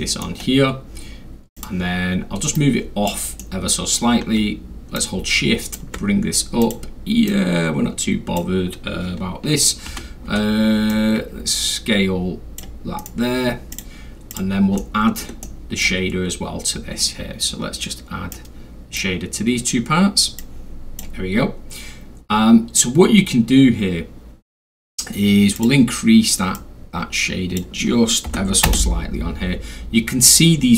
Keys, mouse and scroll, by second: 0.0 alt+middle click, 1.6 click, 2.6 click, 3.4-3.9 middle drag, 5.0 shift+click, 6.6 shift+click, 7.3-8.4 drag, 9.9 e, 10.9-12.6 drag, 10.9 r, 13.0 right click, 13.7 click, 14.3 click, 14.8 alt+middle click, 15.4 alt+middle click, 16.1 alt+middle click, 16.2 scroll, 17.5-17.9 scroll, 18.3 click, 20.4 click, 22.2 scroll up 1, 22.2 scroll, 22.9 middle click, 22.9 scroll, 25.6 click, 26.6-27.6 drag, 28.2 5, 28.7 Return, 30.4 middle click, 30.4 scroll up 2, 30.5 scroll down 2, 30.6 scroll.